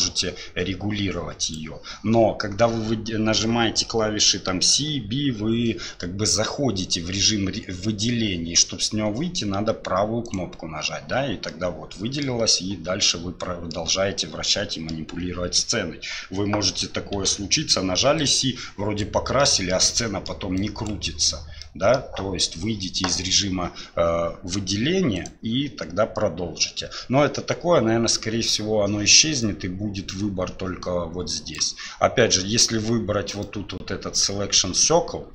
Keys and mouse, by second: 11.5-12.2 middle drag, 13.1-13.7 middle drag, 14.5 middle click, 17.1 c, 29.4-31.6 drag, 33.5 click.